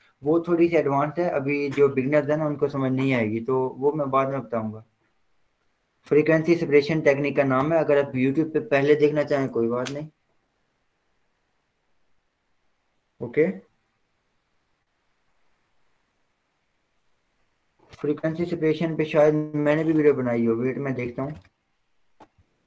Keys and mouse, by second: 0.9 v, 3.2-6.4 drag, 15.0 click, 18.5 click, 18.7 super+e, 21.5 click.